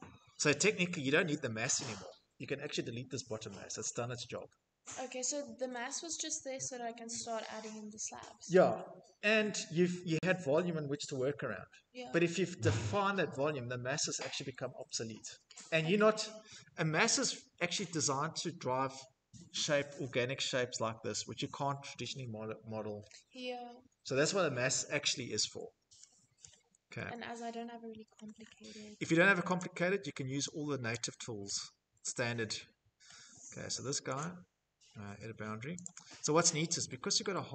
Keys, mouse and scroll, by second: 5.9 scroll, 24.6 middle click, 24.7 middle click, 24.7 middle click, 27.2 middle click, 27.4 scroll, 28.6 click, 29.9 click, 32.1 middle click, 33.2 click, 34.9 click, 36.4 shift+middle click.